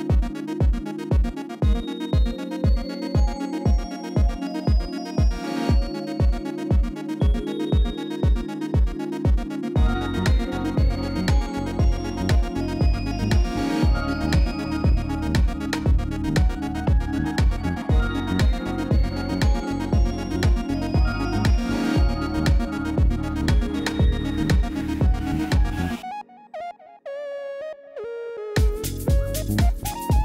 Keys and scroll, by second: 0.9 Tab, 4.3 3, 12.8 ctrl+r, 13.8 Return, 15.1 ctrl+b, 18.0 shift+z, 19.8 b, 22.0 shift+z, 24.5 i.